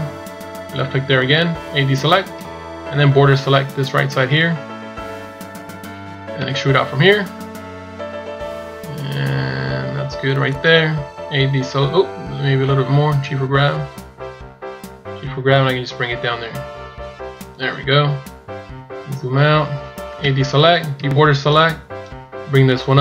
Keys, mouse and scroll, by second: 2.2 b, 18.3-19.1 scroll down 1, 19.1-20.0 scroll down 1, 20.0 a, 20.9 b.